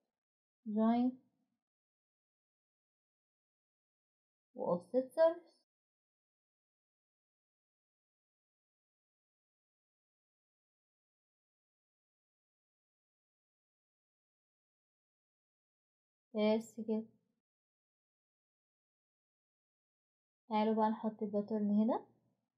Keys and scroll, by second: 9.2-10.1 typing, 10.6 Return, 11.0 Return, 17.0-17.7 typing.